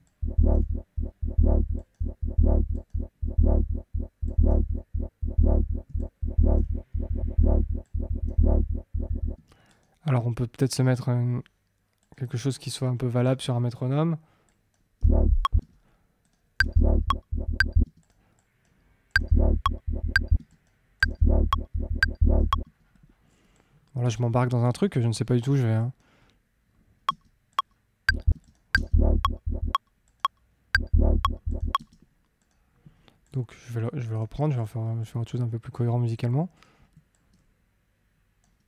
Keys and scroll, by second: 9.3 space, 14.9 space, 17.8 space, 19.1 space, 22.6 space, 27.0 space, 31.7 space.